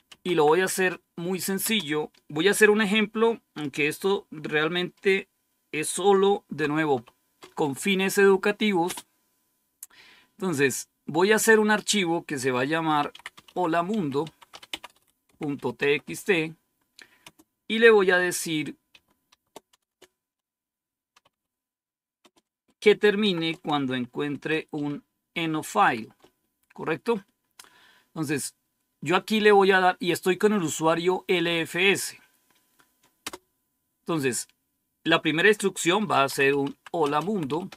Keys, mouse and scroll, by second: 0.0-1.5 typing, 6.9 typing, 8.0-8.8 typing, 12.7-17.1 typing, 18.9-19.8 typing, 21.0-22.1 typing, 23.1-25.7 typing, 33.1 Return, 35.8-37.7 typing.